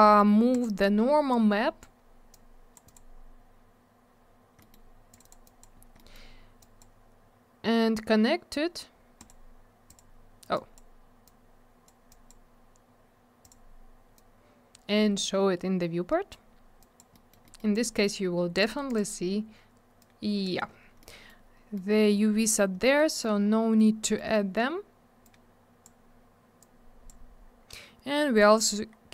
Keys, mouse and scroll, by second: 0.5 click, 0.6 click, 1.3 click, 3.8 click, 4.6 middle click, 4.7 middle click, 5.1 click, 5.2 click, 5.2 click, 5.3 double click, 5.5 click, 5.6 click, 5.8 scroll down 1, 6.0 middle click, 6.1 middle click, 6.6 click, 6.8 click, 9.2 click, 9.3 click, 9.9 click, 10.0 click, 10.6 click, 11.3 click, 12.1 click, 12.3 click, 13.4 click, 13.5 click, 14.2 click, 16.8 click, 17.0 click, 17.1 middle click, 17.3 double middle click, 17.5 middle click, 17.6 middle click, 17.7 right click, 17.9 double right click, 18.5 click, 18.6 click, 18.9 click, 19.0 double click, 20.0 click, 20.7 scroll down 1, 21.0 middle click, 21.8 middle click, 22.8 middle click, 23.0 middle click, 23.2 middle click, 24.1 middle click, 24.2 middle click, 24.3 middle click, 25.2 click, 26.6 click, 27.7-28.8 scroll up 1, 28.9 scroll down 1.